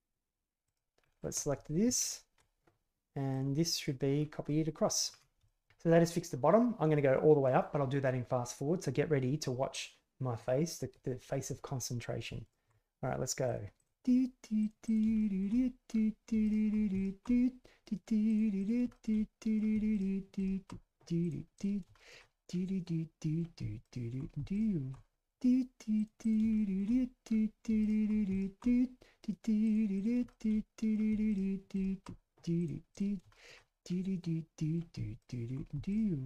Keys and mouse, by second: 0.6 click, 1.0 middle click, 1.8 ctrl+KP_Add, 3.3 drag, 3.7 click, 4.4-5.1 middle drag, 5.4 shift+middle drag, 12.4 alt+right click, 13.5 click, 13.8 click, 14.0 alt+click, 14.6 alt+click, 14.7 shift+click, 15.2 alt+click, 15.7 alt+click, 16.6 click, 17.2 click, 17.5 alt+shift+click, 18.3 shift+click, 18.5 shift+click, 19.0 click, 19.1 alt+middle click, 19.2 click, 19.4 shift+click, 19.8 shift+click, 20.4 drag, 20.9 alt+click, 21.0 click, 21.4 click, 21.8 alt+click, 22.0 shift+click, 22.4 alt+click, 22.5 alt+shift+click, 23.1 shift+click, 23.2 alt+shift+click, 23.5 shift+click, 24.1 click, 24.4 click, 25.5 click, 25.8 shift+click, 26.2 click, 26.5 shift+click, 27.5 shift+click, 27.7 alt+click, 27.8 shift+click, 28.7 shift+click, 29.0 click, 30.3 alt+shift+click, 31.5 shift+click, 31.7 alt+click, 32.0 alt+click, 32.4 click, 32.7 alt+click, 34.3 click, 34.7 ctrl+z, 34.9 alt+click, 35.2 shift+middle click, 35.6 alt+middle click, 35.7 ctrl+KP_Add.